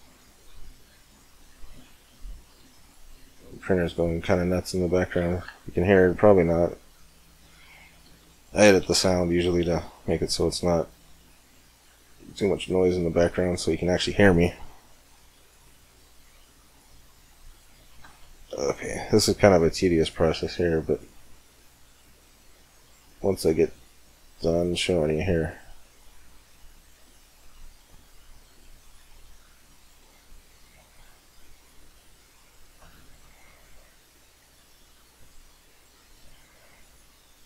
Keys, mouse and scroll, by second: 1.3 c, 4.1 right click, 4.5 click, 4.7 middle click, 4.8-5.8 drag, 5.0-6.5 middle drag, 5.3 c, 7.7-9.4 right drag, 8.2-9.9 middle drag, 9.4 c, 10.1 middle click, 13.1-14.8 right drag, 13.3-15.7 middle drag, 14.6 c, 17.6-19.3 right drag, 17.9-19.7 middle drag, 18.5 c, 21.2-22.6 right drag, 21.4-22.6 middle drag, 22.2 click, 22.4 click, 22.6 click, 22.8 click, 22.8 right click, 23.0 c, 27.2 right click, 27.5 click, 28.0 middle click, 28.0 c, 30.1 middle click, 30.9 c, 32.0-33.9 right drag, 32.3-34.2 middle drag, 33.1 c, 35.1-36.8 middle drag, 35.9 c, 37.1-37.4 right drag, 37.3-37.4 middle drag.